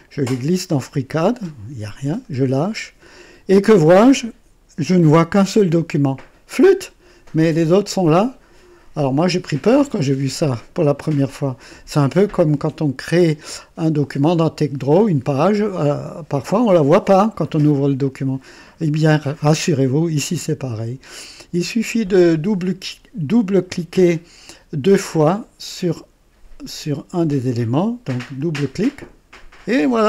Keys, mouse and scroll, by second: 28.3 click.